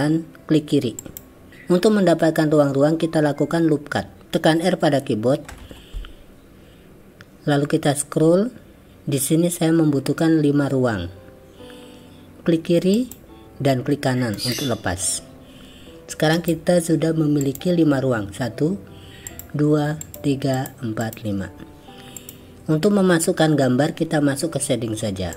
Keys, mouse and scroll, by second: 5.6 ctrl+r, 16.3 click, 19.3 click, 22.3-23.5 drag.